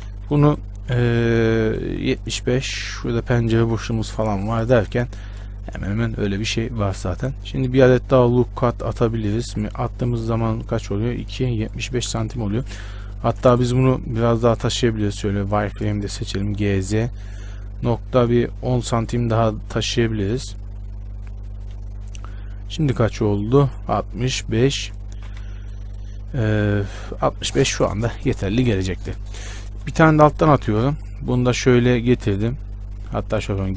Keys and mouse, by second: 0.0 z, 0.3 b, 1.3 b, 2.2 z, 5.7-9.9 drag, 11.4-12.5 middle drag, 12.5 a, 13.3-15.0 middle drag, 13.9-16.6 typing, 23.3-25.4 right drag, 24.9 a, 25.4 z, 25.7 b, 26.6 z, 30.2 ctrl+r.